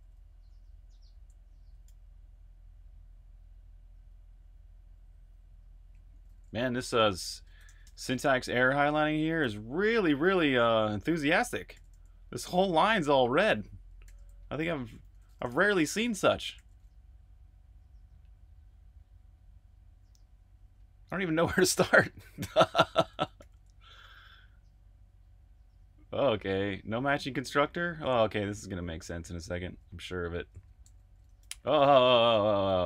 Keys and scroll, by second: 0.0-1.8 typing, 5.4-16.5 typing, 18.3-19.0 typing, 20.2-20.6 typing, 22.9-23.8 typing, 27.8 j, 30.4-31.6 typing.